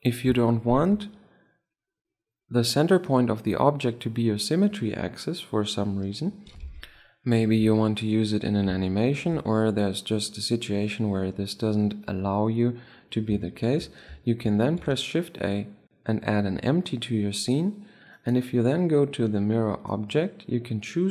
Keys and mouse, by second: 8.7-11.4 middle drag, 15.1 shift+a, 17.6-18.8 middle drag, 18.8-20.8 right drag, 20.4-21.1 drag.